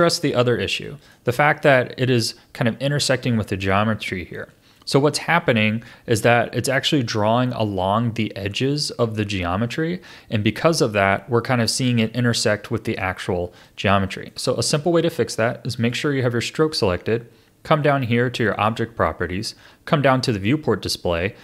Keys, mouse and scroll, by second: 0.8-1.3 shift+middle drag, 1.3-1.8 scroll up 3, 1.7 middle click, 3.7-6.7 shift+middle drag, 12.7-13.6 scroll down 3, 13.6-15.8 shift+middle drag, 15.8 click, 18.5 click.